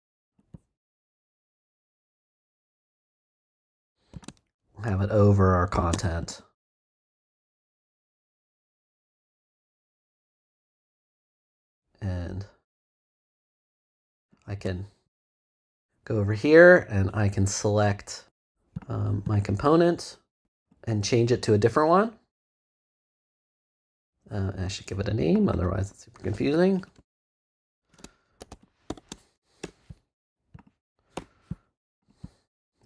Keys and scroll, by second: 26.7 Right, 26.9 space, 28.1-29.4 typing, 29.6 shift+Return, 30.1 Return, 31.1 BackSpace.